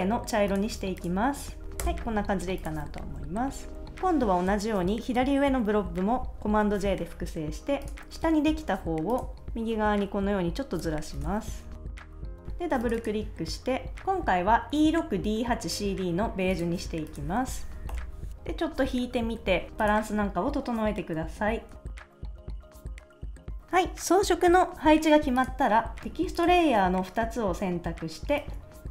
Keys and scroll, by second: 1.8 Return, 2.8 super+s, 6.6 super+j, 11.2 Return, 11.5 shift+Right, 11.9 shift+Down, 11.9 shift+Up, 12.1 Left, 12.2 super+s, 13.9 d, 17.9 super+-, 21.8 super+s, 22.0 shift+Left, 22.5 Right, 22.5 shift+Up, 22.6 Down, 22.7 super+s, 22.8 super+s, 22.9 super+s, 23.1 shift+Left, 23.2 shift+Left.